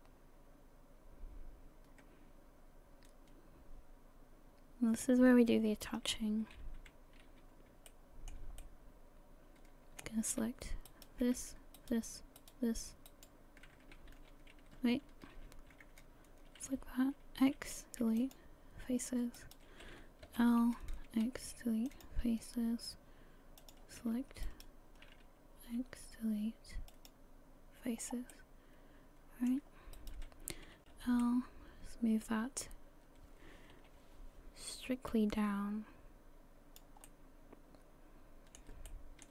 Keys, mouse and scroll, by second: 5.9-6.4 scroll up 3, 6.4 a, 6.6 a, 7.3 scroll up 1, 7.9 shift+middle click, 8.6 middle click, 10.9 alt+right click, 11.8 alt+shift+right click, 12.4 alt+shift+right click, 13.1 alt+shift+right click, 14.1 ctrl+\, 15.1 ctrl+z, 16.0 scroll up 1, 17.4 x, 19.4 right click, 20.3 l, 21.1 x, 23.6 click, 24.5 alt+right click, 25.6 x, 28.0 scroll down 1, 28.4 middle click, 30.0 right click, 30.8 l, 31.2 middle click, 33.8 KP_1, 35.1 click, 37.0 middle click, 38.9 shift+middle click.